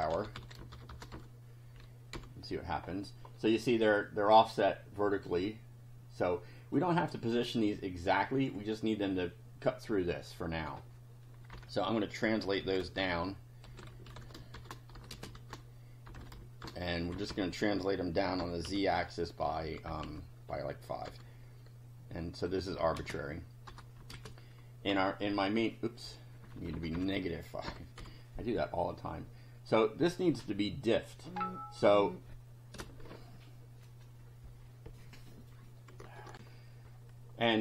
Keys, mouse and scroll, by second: 0.0-1.6 typing, 2.1 F5, 4.1-6.9 drag, 10.6 click, 11.5 Home, 12.2-16.7 typing, 17.1 Left, 18.2-21.1 typing, 22.8 Right, 23.0 space, 23.7 BackSpace, 24.0 Right, 24.1 space, 24.9 F5, 26.5 BackSpace, 27.7 -, 28.0 F5, 29.7 click, 36.3 ctrl+r.